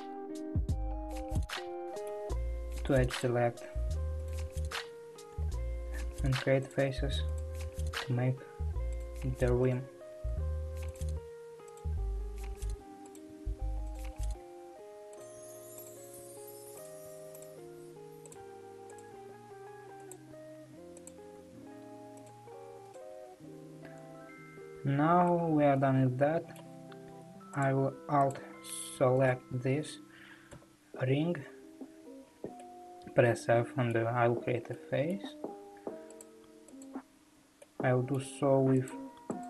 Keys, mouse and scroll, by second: 0.7 shift+middle click, 1.4 2, 1.7-3.2 middle drag, 3.2 click, 4.4 shift+click, 5.4 f, 6.7 click, 7.4 shift+click, 8.1 f, 9.0 click, 9.6 shift+click, 10.3 f, 10.9 click, 11.8 shift+click, 12.5 f, 13.2 click, 13.8 shift+click, 14.3 f, 15.2 click, 16.1 shift+click, 16.2 f, 16.8 click, 17.6 shift+click, 17.7 f, 18.3 click, 19.0 shift+click, 19.2 f, 20.1 click, 21.4 f, 22.3 click, 23.3 f, 25.4-27.6 middle drag, 27.6 click, 28.3 click, 29.3 alt+click, 30.5 f, 31.3-32.6 scroll down 2, 32.7-36.2 middle drag, 36.2 click, 37.2 alt+click, 37.6-38.9 middle drag, 38.9-39.4 drag.